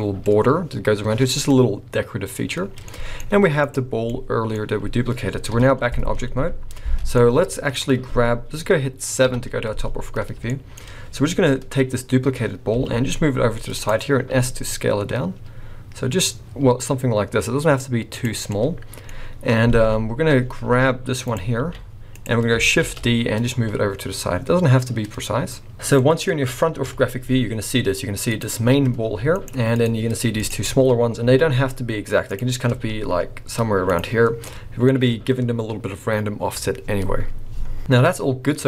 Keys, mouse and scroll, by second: 0.0 middle click, 2.6 scroll down 4, 2.8 middle click, 3.6 click, 3.9 scroll down 1, 4.1 middle click, 5.5 KP_1, 7.1 scroll down 1, 7.2 middle click, 9.3 KP_7, 10.2 scroll down 3, 10.5 shift+middle click, 10.8-12.0 scroll up 3, 12.0 scroll down 1, 12.8 g, 14.0 scroll up 2, 14.3 s, 18.4 scroll down 3, 18.5 middle click, 19.1-19.4 scroll up 2, 19.8 KP_1, 20.6 s, 21.6 g, 22.9 shift+d, 26.0 middle click, 26.8 KP_1, 27.5 scroll up 2, 28.3 click, 29.1 g, 29.8 click, 30.4 shift+click, 30.7-31.3 scroll down 2, 31.2 g, 32.7 r, 34.1-34.5 scroll down 5, 34.5 middle click, 38.2 middle click.